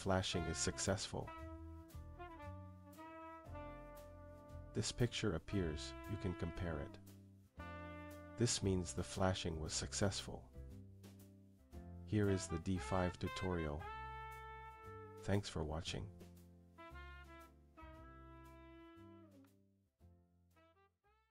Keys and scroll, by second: 5.4 Up, 11.0 Return.